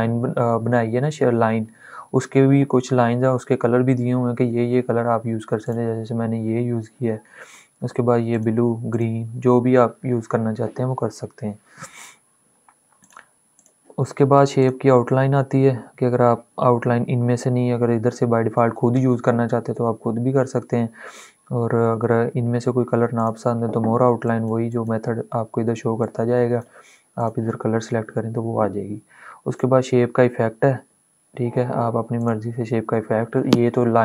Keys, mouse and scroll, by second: 5.4-7.4 drag, 8.2 click, 12.7 click, 22.9 click, 23.0 click, 31.3 click, 32.0 click, 33.9 ctrl+z.